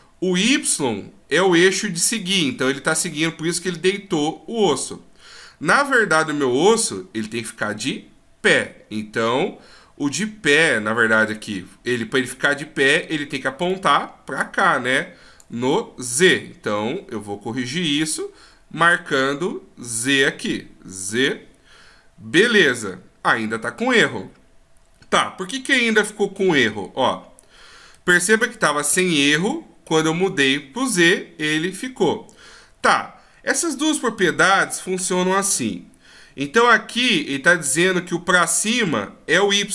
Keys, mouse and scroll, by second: 13.6 d, 13.7 click, 21.2 click, 22.7 middle click, 26.4 ctrl+z, 27.0 middle click, 30.3 click, 32.7 ctrl+z.